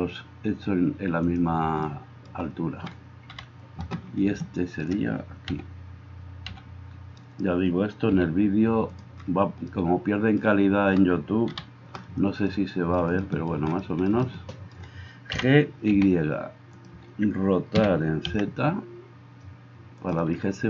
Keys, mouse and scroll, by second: 3.3 KP_7, 5.5 g, 6.5 g, 7.2-14.1 drag, 8.2 g, 11.5 KP_7, 14.1-20.6 shift+right drag, 15.3 g, 17.7 r.